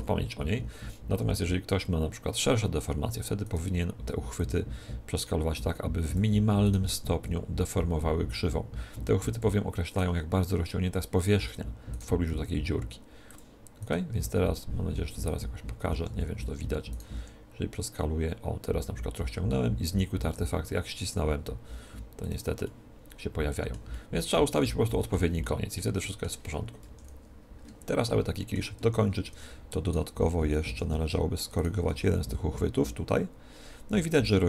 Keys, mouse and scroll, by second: 3.3-5.3 right drag, 4.3-6.2 drag, 6.6-8.2 right drag, 6.8 g, 8.6 g, 9.3-10.8 drag, 9.8-10.8 right drag, 10.0 g, 11.7 click, 12.2 g, 12.6 middle click, 12.8 right click, 13.6 click, 13.9 g, 14.2-15.2 drag, 14.2-15.6 right drag, 16.0 middle click, 16.8-18.8 right drag, 17.0 s, 22.2-24.1 drag, 22.6-27.6 middle drag, 26.7 KP_1, 28.0-29.8 middle drag, 28.8 Tab, 29.2 Tab, 29.8-33.4 right drag, 31.7 g, 34.1-34.4 drag.